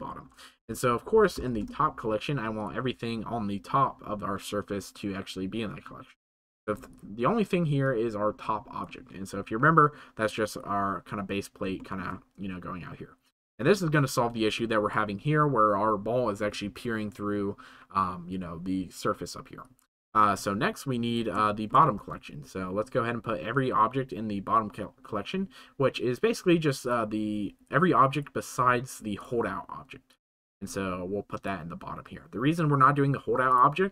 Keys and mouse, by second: 7.8 click, 9.7-11.6 drag, 11.9 shift+middle click, 13.6-19.1 drag, 19.6-21.1 middle drag, 21.4 shift+middle drag, 22.0 ctrl+s, 26.8 click, 30.1 click, 33.5-33.9 middle drag.